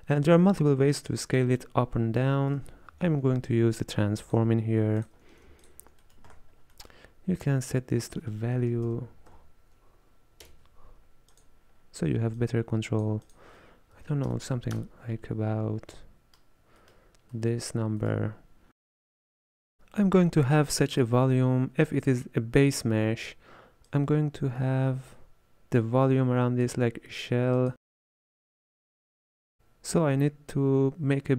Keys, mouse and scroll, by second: 5.7-6.1 alt+shift+drag, 6.1 middle click, 6.4-6.8 scroll up 6, 6.8 middle click, 7.7 drag, 12.4-16.0 drag, 16.0-17.8 middle drag, 17.8 scroll down 4, 18.1-18.5 middle drag, 18.5-19.3 scroll up 2, 19.3 middle click, 21.1-27.0 drag, 27.6-29.6 drag.